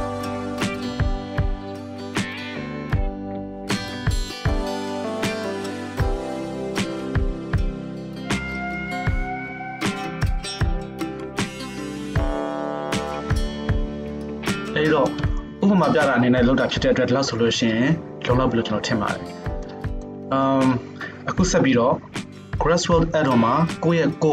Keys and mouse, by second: 0.0-24.3 drag, 12.5 shift+space, 13.6 shift+space, 14.0 n, 21.7 n.